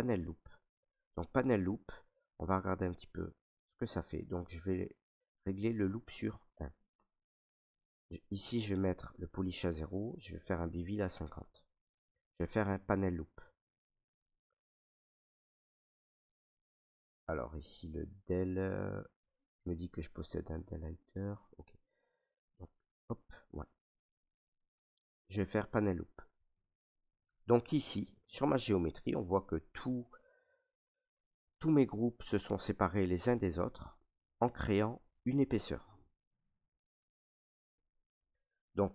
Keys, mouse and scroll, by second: 2.2 alt+right click, 2.8 ctrl+right click, 3.3 alt+right click, 3.9 right click, 5.5 click, 6.5 1, 6.9 Tab, 10.2 click, 11.0 typing, 11.4-13.9 Tab, 12.6 click, 13.9 click, 22.6 click, 25.8 click, 26.9 ctrl+right click, 27.8 right click, 28.6 ctrl+right click, 29.1 alt+right click, 31.3 right click, 32.8 ctrl+right click, 33.3 alt+right click, 34.1 ctrl+right click, 34.9 right click, 38.1 right click, 38.8 ctrl+right click.